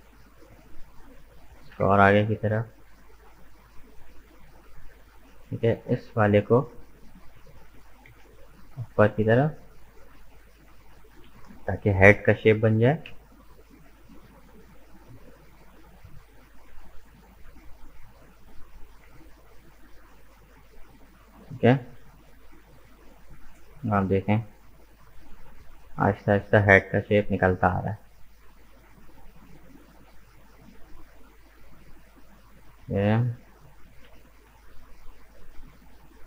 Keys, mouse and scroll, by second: 0.0 shift+right click, 0.3-1.5 middle drag, 1.5 g, 4.6-5.6 middle drag, 5.6 right click, 6.2 shift+right click, 6.5-7.7 middle drag, 7.7 g, 9.6 middle click, 10.5 right click, 11.1 shift+right click, 11.5-12.8 middle drag, 12.8 g, 15.5-16.6 middle drag, 16.6 right click, 17.3 shift+right click, 17.7 scroll down 1, 17.7-18.8 middle drag, 18.8 g, 21.2-24.2 middle drag, 25.3-27.3 middle drag, 27.3 right click, 28.0-29.6 middle drag, 29.6 shift+right click, 31.0 shift+right click, 32.0-33.9 middle drag, 33.9 g.